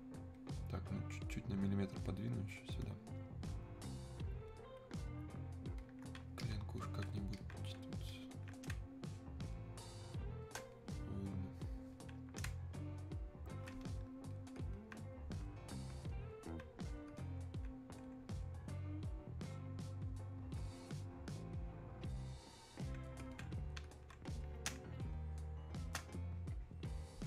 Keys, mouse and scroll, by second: 8.7 space, 9.6 click, 9.7 space, 11.7 click, 12.5 space, 13.0 click, 13.3 space, 14.4-24.7 drag, 24.7 space, 25.2 click, 25.2 space, 26.3-27.2 drag.